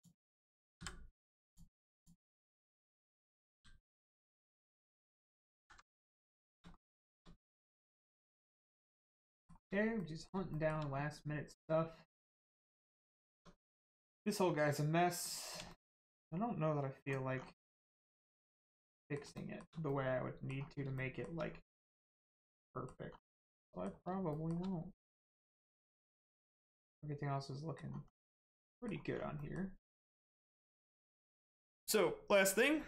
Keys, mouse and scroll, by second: 0.8 m, 1.4 click, 4.0 right click, 4.6 scroll down 1, 4.9 middle click, 5.6 alt+z, 6.0 middle click, 6.4 shift+middle click, 7.5 middle click, 7.6 middle click, 8.3 shift+middle click, 8.8 middle click, 9.3 shift+middle click, 10.0 middle click, 10.0 middle click, 10.5 shift+middle click, 10.9 scroll up 1, 12.4 middle click, 13.4 Tab, 14.9 scroll down 1, 15.2 middle click, 15.7 shift+middle click, 16.3 scroll up 1, 17.0 scroll down 1, 18.3 middle click, 19.3 shift+middle click, 19.8 scroll up 1, 19.9 middle click, 20.7 scroll up 1, 20.9 shift+middle click, 21.4-22.0 scroll up 1, 22.0 middle click, 23.1 scroll down 1, 23.3 middle click, 24.3 shift+middle click, 25.2 middle click, 25.3 middle click, 25.9 shift+middle click, 26.5 middle click, 26.5 middle click, 28.1 scroll down 1, 28.3 middle click, 29.1 scroll up 1, 29.3 middle click, 30.0 scroll up 1, 30.3 middle click.